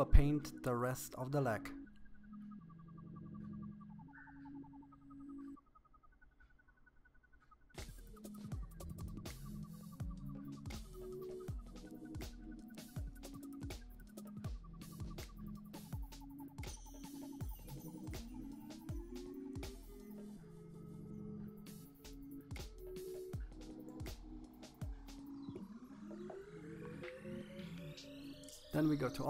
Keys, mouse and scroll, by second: 3.6 right click, 4.0 click, 5.0 middle click, 5.5 middle click, 5.9 click, 6.9 click, 7.4 middle click, 8.2 click, 8.7 middle click, 9.6 click, 10.0 right click, 10.2 middle click, 10.5 KP_1, 10.9 click, 12.7 click, 13.0 middle click, 13.2 KP_1, 13.3 shift+middle click, 13.4 scroll up 3, 13.5 middle click, 14.0 click, 16.7 KP_1, 17.3 click, 18.2 KP_3, 18.7 click, 19.7 middle click, 19.9 KP_1, 20.0 middle click, 20.5 click, 22.0 click, 23.0 scroll down 1, 23.1 middle click, 23.3 KP_3, 23.5-23.9 scroll up 8, 23.9 click, 24.8-25.9 shift+middle drag, 25.9-28.8 drag.